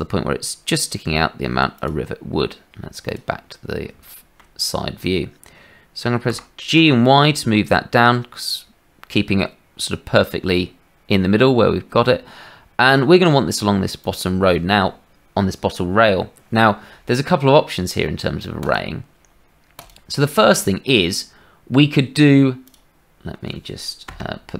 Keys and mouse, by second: 3.0 middle click, 4.1 shift+middle click, 6.3 g, 22.6-24.0 drag, 24.0-24.5 middle drag.